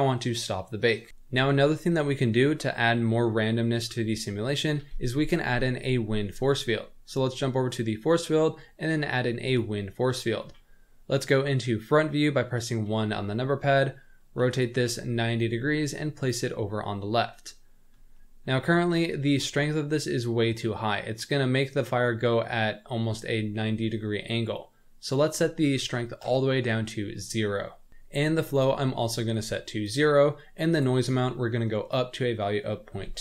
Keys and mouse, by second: 1.1 shift+a, 4.7 shift+a, 10.4 KP_1, 12.8 r, 14.8 g, 18.1-18.5 shift+middle drag, 25.2-26.3 drag, 28.5-29.9 drag, 30.7-33.2 drag.